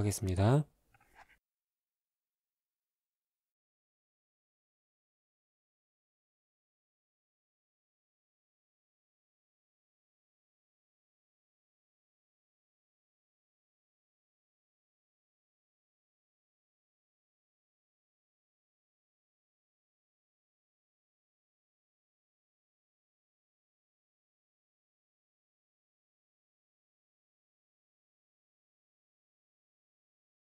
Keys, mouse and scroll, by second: 1.4-1.8 scroll down 2, 2.4 click, 3.4 click, 4.4-5.0 scroll down 2, 5.0-6.0 scroll down 3, 7.3 click, 9.9 right click, 11.5 Home, 12.7 click, 15.1 click, 16.0 Home, 17.3 c, 17.7 u, 18.0 b, 18.4 e, 18.7 Return, 20.3 z, 22.0 click, 24.1 click, 24.9 KP_1, 25.1 Tab, 25.4 KP_1, 25.9 Return, 27.4-28.4 drag, 28.4 KP_2, 28.6 KP_0, 28.8 KP_0, 29.4 Return.